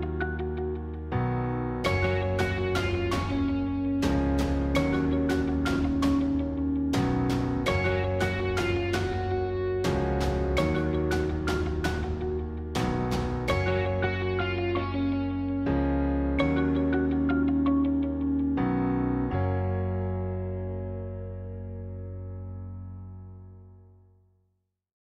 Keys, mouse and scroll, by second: 0.0 click, 0.5-4.2 middle drag, 4.2-4.5 scroll up 1, 4.5-6.4 middle drag, 6.4 scroll up 2, 6.7 middle click, 7.4 scroll down 2, 7.6-9.2 middle drag, 9.2-9.8 scroll up 1, 9.8-10.6 scroll up 1, 10.6 scroll up 1, 10.7-12.0 drag, 12.0-16.4 middle drag, 20.9 ctrl+alt+KP_0, 22.9-25.1 middle drag.